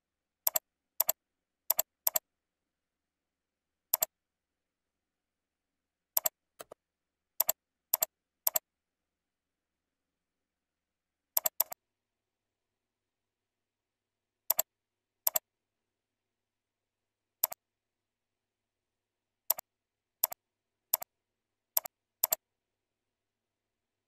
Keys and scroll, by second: 1.6 ctrl+c, 2.3 ctrl+v, 14.0 ctrl+b, 20.8 ctrl+c, 21.2 ctrl+v.